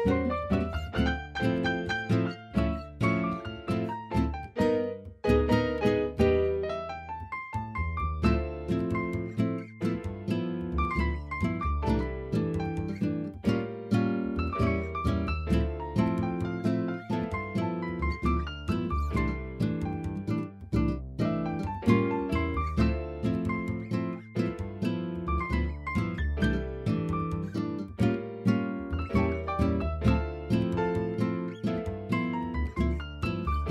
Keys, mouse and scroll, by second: 0.0 click, 1.4-2.8 middle drag, 3.6-5.7 drag, 5.7-6.1 scroll up 1, 6.1-7.0 scroll down 1, 7.0 middle click, 7.5 scroll down 1, 8.6 r, 9.0 x, 9.6 click, 9.9 middle click, 10.7 alt+z, 11.2-11.7 middle drag, 12.0 KP_1, 12.8 alt+z, 14.4 r, 15.1 click, 17.0 r, 17.5 x, 19.5 r, 19.5 y, 20.8 click, 21.9-22.3 middle drag, 23.0 middle drag, 23.6 shift+middle drag, 23.9-24.5 middle drag, 25.1 click, 27.6 r, 28.2 z, 30.3 click, 32.0 middle drag, 32.8 click, 33.1 click.